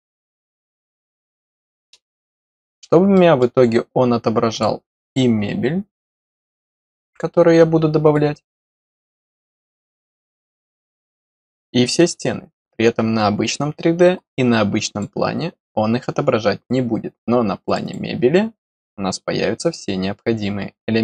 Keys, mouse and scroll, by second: 0.5 click, 2.1 middle click, 3.0 middle click, 4.4 click, 5.0 click, 6.1 click, 7.0 right click, 7.9 click, 8.8 right click, 9.4 click, 11.7 click, 11.9 click, 14.7 click, 14.8 click, 17.6 click, 17.7 click.